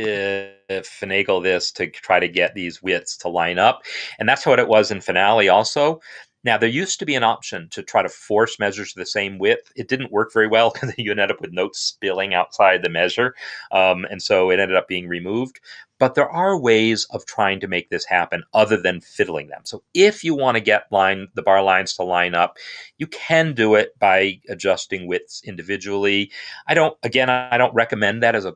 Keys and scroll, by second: 0.6 shift+[, 1.0 shift+[, 2.0 shift+[, 24.2 shift+], 27.4 ctrl+a.